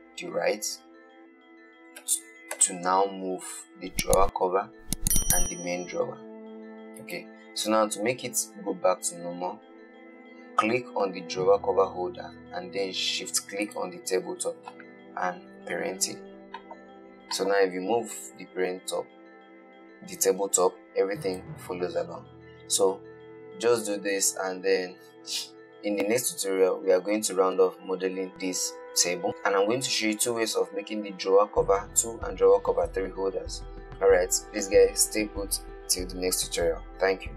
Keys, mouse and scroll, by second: 2.3 g, 13.9 shift+click, 15.8 ctrl+p, 17.7 click, 18.6 g.